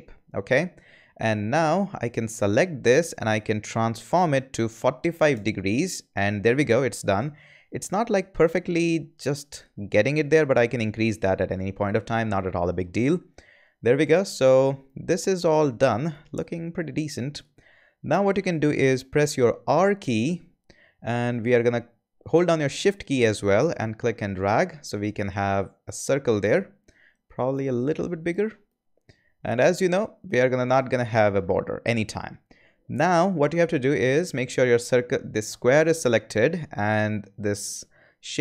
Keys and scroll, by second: 4.6-5.4 typing, 19.7 r.